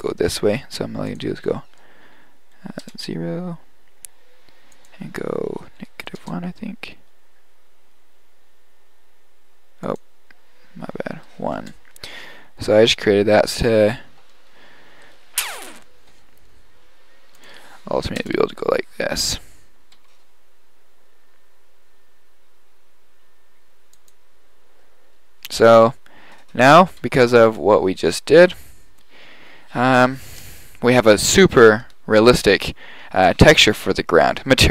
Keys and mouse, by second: 4.5 middle click, 16.3-18.3 right drag, 18.3 KP_0, 19.8-20.1 right drag, 20.1 g, 26.2 middle click, 26.8-27.5 middle drag.